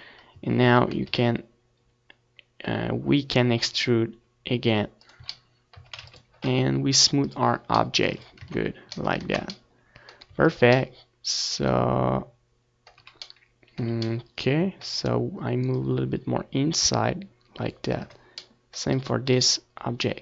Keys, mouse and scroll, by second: 0.5 KP_Decimal, 1.0 Tab, 1.2 Tab, 1.8 z, 2.3 middle click, 4.3 e, 5.6 click, 5.7 z, 6.2 Tab, 6.4 ctrl+s, 8.5 ctrl+s, 8.8 Tab, 9.7 Tab, 10.6 ctrl+s, 13.3 z, 13.5-16.0 middle drag, 14.1 z, 16.0-17.8 drag, 18.2 ctrl+s, 18.5 middle click, 19.2-20.2 right drag.